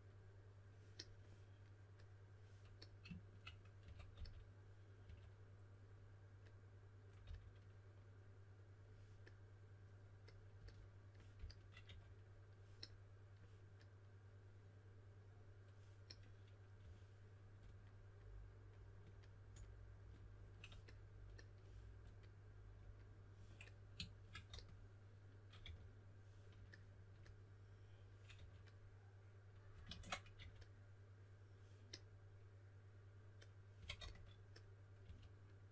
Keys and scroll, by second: 3.8-5.0 typing, 7.2 typing, 11.3-11.8 typing, 16.7 typing, 24.4-26.1 typing, 28.3 4, 29.8 super+z, 30.3 4, 32.9-35.0 typing.